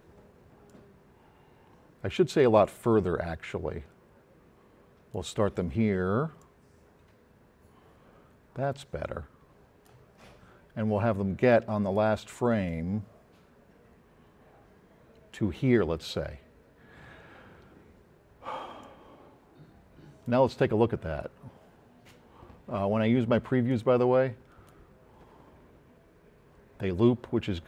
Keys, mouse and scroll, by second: 2.9-5.3 drag, 6.4-10.0 drag, 11.6 click, 12.7-15.5 drag, 16.3 middle click, 18.8-20.3 drag.